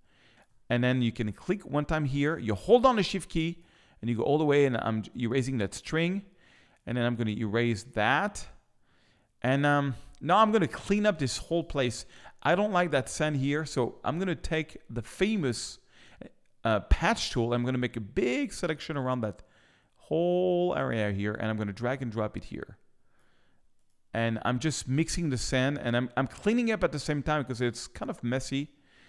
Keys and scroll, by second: 10.9 space.